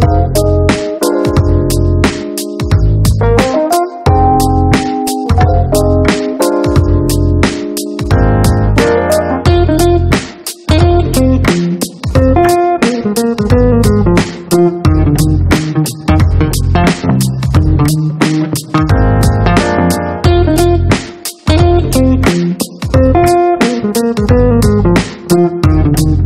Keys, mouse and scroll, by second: 1.2 click, 5.8 click, 7.0 click, 8.7 click, 15.9 e, 17.4 click, 19.3 click, 21.7 click, 23.0 click, 23.4 click, 24.3 click, 24.5-25.0 scroll down 1.